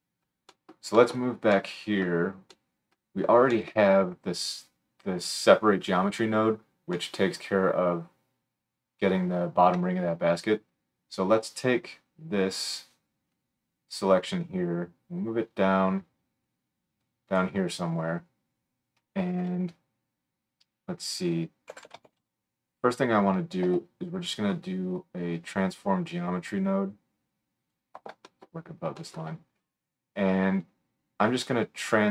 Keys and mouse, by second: 2.5 click, 2.7 right click, 2.8-3.2 drag, 3.2-12.8 right drag, 12.8-27.7 middle drag, 27.7-29.2 right drag.